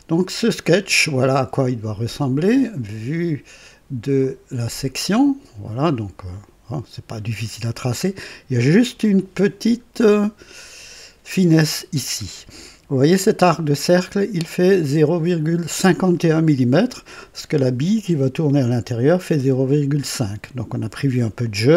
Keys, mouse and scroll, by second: 4.1 click, 7.9-8.5 scroll up 4, 10.0 scroll up 2, 11.1-11.5 scroll down 2.